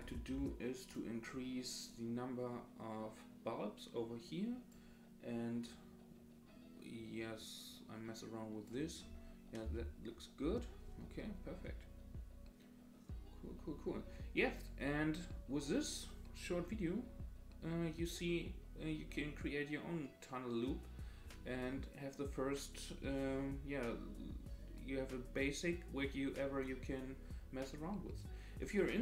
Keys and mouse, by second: 0.0 click, 1.9-4.7 drag, 5.8-8.8 drag, 9.6 space.